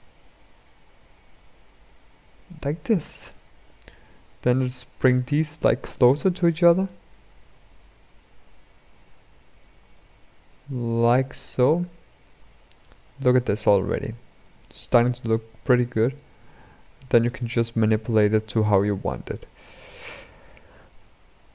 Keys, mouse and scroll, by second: 4.2-9.6 drag, 12.0-14.8 middle drag, 14.8-17.6 drag, 21.3-21.5 drag.